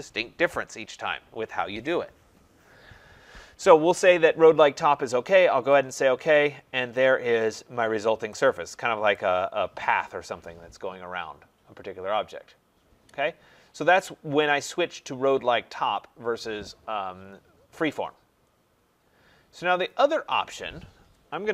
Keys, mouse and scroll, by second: 5.9 click, 6.5 middle click, 8.3 right click, 9.1 right click, 13.3 middle click, 13.4 middle click, 21.4-21.5 typing.